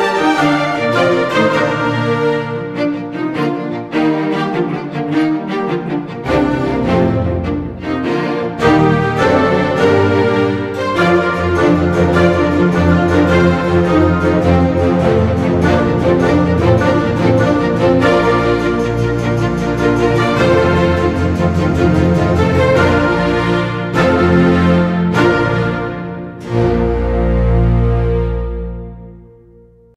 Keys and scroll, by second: 11.1 space, 20.1 Delete, 20.5 ctrl+d, 28.0 Delete, 28.3 ctrl+d, 28.4 ctrl+0.